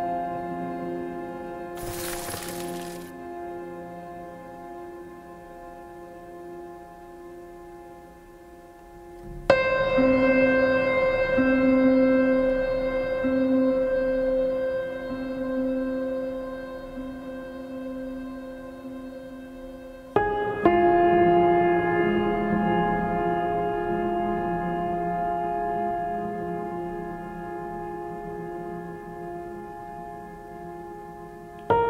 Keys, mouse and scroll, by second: 2.5 right click, 4.6 right click, 5.2 right click, 8.5 right click, 10.0 right click, 25.3 right click, 27.3 right click, 30.0 right click.